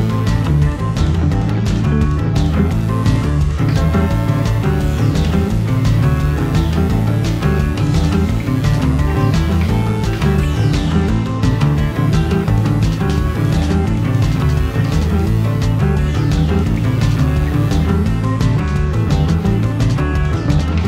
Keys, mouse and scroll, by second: 0.2 shift+middle click, 0.2 scroll up 1, 0.5 shift+middle click, 0.8 middle click, 1.0 shift+click, 1.0 middle click, 1.1-17.5 typing, 1.5 middle click, 1.6 alt+click, 1.9 middle click, 2.3 scroll down 2, 2.5 Tab, 2.6 middle click, 2.8 shift+middle click, 2.8 scroll up 1, 3.3 middle click, 3.6 scroll up 2, 3.7 shift+click, 3.8 middle click, 4.6 click, 5.5 middle click, 5.7 middle click, 5.8 scroll up 1, 6.0 middle click, 8.1 scroll up 2, 8.3 middle click, 8.7 scroll down 2, 8.8 Tab, 8.8 middle click, 9.2 ctrl+z, 9.4 middle click, 9.5 ctrl+r, 10.1 click, 10.4 ctrl+z, 10.8 middle click, 10.9 middle click, 11.1 alt+m, 11.1 shift+click, 11.2 alt+m, 11.4 shift+click, 11.5 middle click, 11.6 ctrl+r, 11.8 click, 12.1 Tab, 12.1 middle click, 12.1 Tab, 12.4 scroll down 1, 12.6 scroll up 2, 12.9 middle click, 13.5 scroll up 2, 13.7 scroll down 2, 14.0 alt+click, 14.3 middle click, 14.6 shift+middle click, 14.8 shift+middle click, 14.8-15.1 scroll up 3, 15.1 scroll down 2, 15.2 shift+middle click, 15.7 shift+middle click, 16.2 middle click, 16.3 scroll up 1, 17.5 click, 17.6 shift+click, 18.2 Tab, 18.3 middle click, 18.7 middle click, 18.7 scroll up 1, 18.9 scroll down 1, 19.0 middle click, 19.2 click, 19.9 shift+middle click, 19.9 click, 20.4 click, 20.5 middle click, 20.6 click, 20.8 ctrl+l, 20.8 middle click.